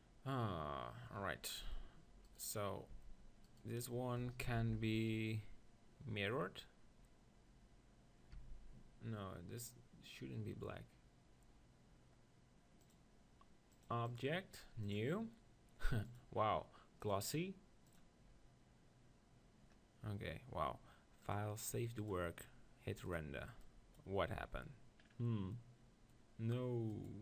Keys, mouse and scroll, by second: 2.3-5.2 drag, 2.9 Tab, 4.5 ctrl+l, 8.4 Tab, 14.2-19.6 drag, 21.5-25.4 drag, 25.4-26.9 middle drag, 26.9-27.2 drag.